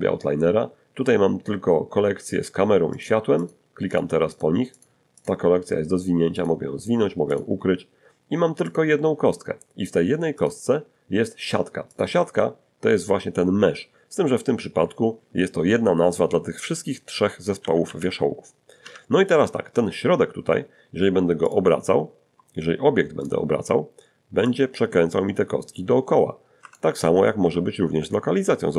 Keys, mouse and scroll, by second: 2.9 click, 3.4 click, 3.9 click, 4.3 click, 4.8 click, 5.2 click, 6.4 click, 7.3 click, 8.7 click, 10.4 click, 11.9 click, 17.6 a, 17.9 a, 19.3 Tab, 21.5 click, 23.2 right click, 24.5-26.9 drag, 26.6 Escape, 27.4 g.